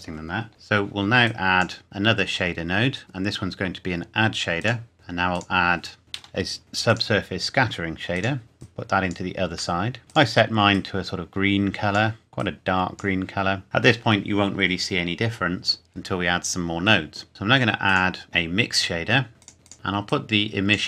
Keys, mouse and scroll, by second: 1.2 click, 4.6 click, 4.9-5.3 scroll down 1, 5.3 click, 6.9 click, 9.8 middle click, 10.1 click, 17.3 click, 19.4 click, 19.7 middle click, 20.1 click.